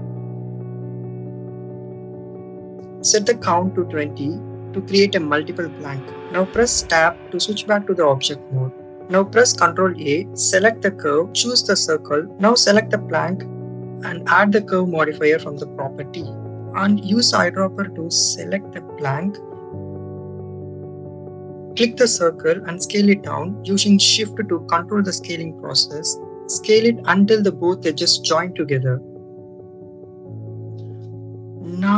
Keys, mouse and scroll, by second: 2.0 click, 3.5-6.0 drag, 7.4 click, 7.6 Tab, 9.8 shift+a, 12.7 click, 14.7-15.9 drag, 21.8 click, 28.7 shift+click, 29.7-31.9 drag.